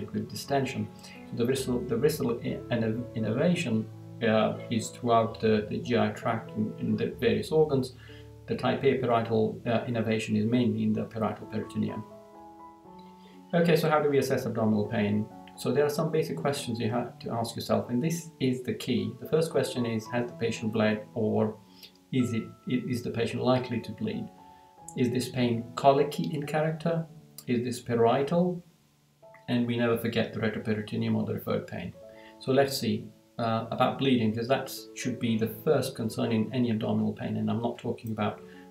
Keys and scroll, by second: 12.4 Down, 14.3 Down, 18.9 Down, 23.9 Down, 26.4 Down, 28.2 Down, 31.7 Down.